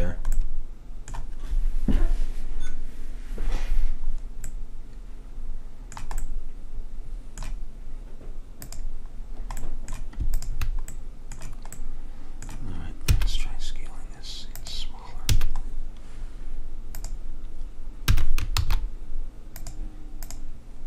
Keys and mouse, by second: 0.1-3.1 middle drag, 4.6-8.7 middle drag, 8.7-12.3 drag, 9.3 middle click, 12.3-13.7 middle drag, 13.2 s, 15.4 a, 15.8-17.0 middle drag, 17.0-18.1 drag, 18.1 s, 20.3-20.8 drag.